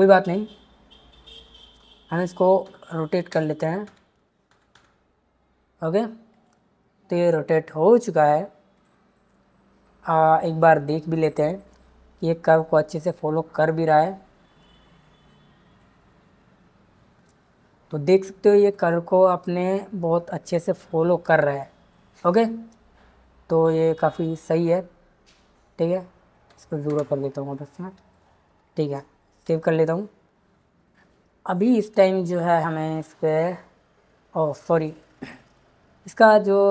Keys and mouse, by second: 2.6-4.7 typing, 6.3 click, 11.7-15.8 drag, 18.7-24.2 drag, 25.8-26.9 drag, 29.5 ctrl+s.